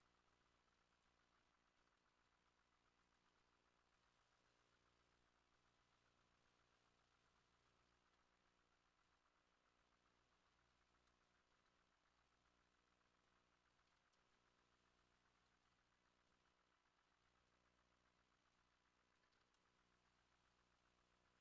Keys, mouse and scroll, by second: 0.0 alt+shift+click, 0.6 alt+shift+middle click, 1.0 alt+shift+click, 1.9 Tab, 2.1 ctrl+middle click, 2.2 ctrl+a, 3.9 ctrl+middle click, 4.0 ctrl+b, 4.8-7.6 shift+drag, 5.2 shift+scroll up 1, 5.9-8.5 shift+middle drag, 9.1 3, 9.9-10.9 alt+middle drag, 10.6 alt+z, 11.0 shift+middle click, 11.3 1, 11.6 a, 11.8 a, 12.2 b, 13.8 g, 14.0 y, 14.3-15.7 shift+middle drag, 15.4 ctrl+z, 15.8 Escape, 16.4 a, 16.5 a, 17.2 b, 19.2 g, 19.4 y, 19.7-21.4 shift+middle drag.